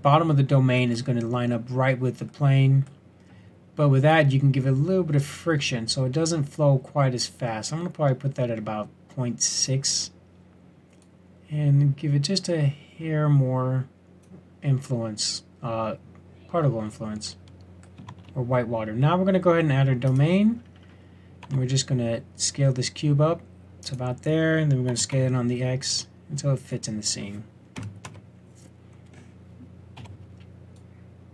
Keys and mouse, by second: 4.1-6.6 drag, 11.0 click, 18.1 shift+a, 20.5-21.4 drag, 21.4 s, 24.9 s, 28.0 KP_1, 29.9 z.